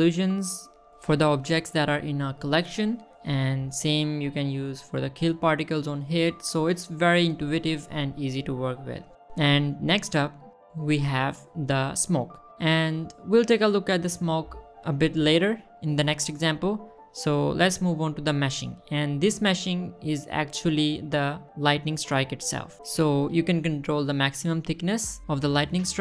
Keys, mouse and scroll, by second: 5.1 middle click, 6.1 click, 6.9 click, 10.4 scroll up 2, 11.1 click, 11.7 click, 13.0-13.7 scroll down 2, 13.8-14.6 scroll down 2, 14.6-15.0 scroll up 2, 17.1 click, 18.5 click, 19.3-20.2 middle drag, 23.4 shift+middle drag, 24.7-26.0 shift+drag.